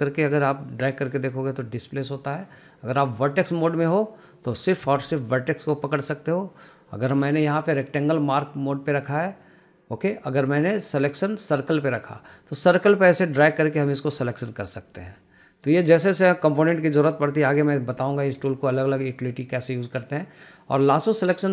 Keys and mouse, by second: 0.1 g, 3.7 click, 4.8 click, 5.3 g, 6.7 click, 7.4 click, 8.4-12.2 drag, 19.6-21.5 drag.